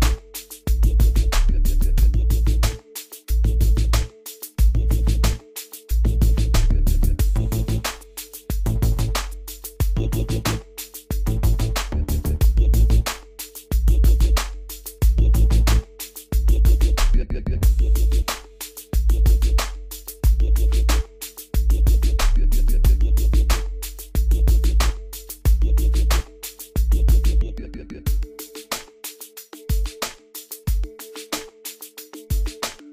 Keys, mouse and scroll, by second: 0.2 scroll up 1, 1.7 scroll down 1, 2.8 scroll up 1, 3.2 scroll down 1, 4.5-5.3 scroll up 1, 6.0 scroll down 1, 6.7 scroll down 1, 8.2-8.5 scroll up 1, 9.1-9.5 scroll up 1, 9.5 scroll down 1, 9.7-10.0 scroll up 1, 11.3 click, 13.8 middle click, 13.9 scroll up 1, 16.8 right click, 17.6 click, 20.3 scroll down 1, 23.3-32.9 drag.